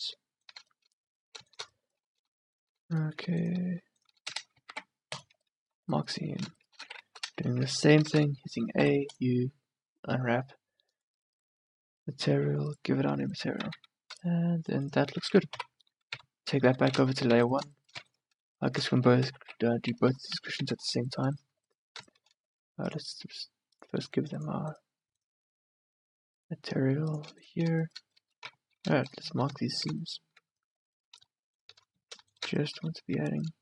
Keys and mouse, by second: 4.4 click, 4.8 ctrl+e, 8.2 a, 8.3 a, 8.9 u, 13.3 Tab, 13.8 a, 15.6 m, 16.2 click, 16.8 1, 17.4 a, 19.2 m, 20.1 2, 20.6 a, 24.8-27.3 middle drag, 27.6 middle click, 28.6 Tab.